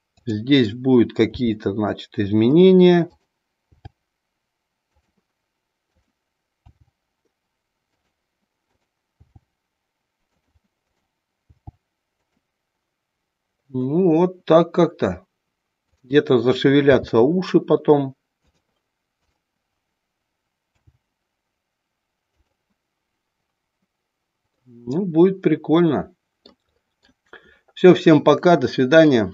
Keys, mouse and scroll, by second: 1.3 g, 2.6 click, 3.1 click, 3.6 g, 5.1 click, 5.8 click, 7.1 g, 8.7 click, 9.4 g, 10.4 click, 10.7 click, 11.4 g, 12.3 click, 16.0-16.3 drag, 16.8 g, 18.6 click, 19.2-19.7 drag, 20.8 g, 22.3 click, 24.7-26.6 middle drag, 27.0 middle click.